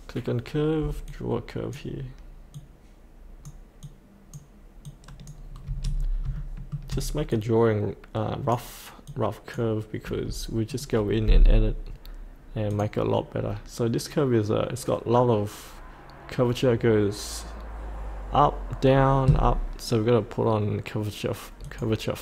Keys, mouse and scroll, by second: 4.9 click, 6.0 scroll up 1, 6.3 shift+middle click, 7.3 click.